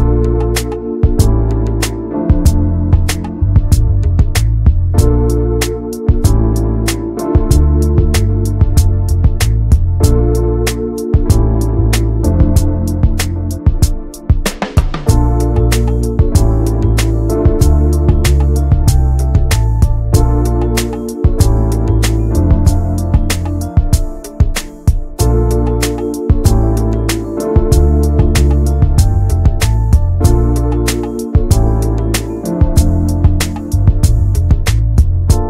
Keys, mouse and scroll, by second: 0.6 middle click, 1.4-3.9 drag, 6.4 click, 6.6 n, 6.9 middle click, 7.9 a, 9.2 middle click, 9.8 click, 10.0 shift+a, 11.6 click, 11.8 scroll up 2, 12.1 alt+middle click, 12.4 alt+middle click, 12.6 scroll up 1, 12.9 shift+middle click, 13.2 s, 14.7 click, 16.3 s, 17.2 alt+middle click, 17.7-18.3 scroll down 3, 18.3 s, 20.3 s, 22.5 middle click, 22.8 ctrl+a, 23.7 ctrl+a, 24.6 middle click, 24.7 scroll up 1, 24.9 shift+middle click, 25.2 click, 25.6 n, 26.8 click, 27.9-30.6 drag, 30.6 middle click, 31.1 Tab, 31.4-33.5 middle drag, 33.5 Tab, 33.9 middle click, 34.3 n, 34.6 click, 34.8 Tab, 35.3 middle click.